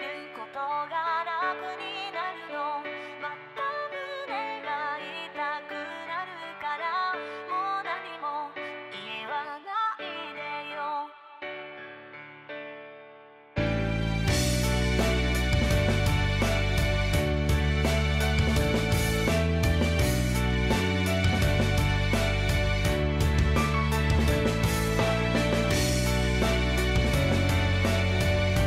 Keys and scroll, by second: 0.1 ctrl+z, 0.3 ctrl+z, 0.5 ctrl+z, 5.8 ctrl+z, 6.4 ctrl+z, 6.5 ctrl+z, 7.7 ctrl+z, 7.9 ctrl+z, 8.5 ctrl+z, 8.8 ctrl+z, 9.8 ctrl+z, 10.2 ctrl+z, 10.3 ctrl+z, 10.6 ctrl+z, 10.9 ctrl+z, 11.1 ctrl+z, 11.2 ctrl+z, 11.7 ctrl+z, 11.9 ctrl+z, 12.2 ctrl+z, 14.4 ctrl+z, 14.7 ctrl+z, 14.8 ctrl+z, 15.9 ctrl+z, 17.0 ctrl+z, 17.1 ctrl+z, 17.5 ctrl+z, 17.7 ctrl+z, 17.8 ctrl+z, 18.6 ctrl+z, 18.9 ctrl+z, 19.2 ctrl+z, 19.7 ctrl+z, 20.7 ctrl+z, 25.3 ctrl+z, 25.5 ctrl+z.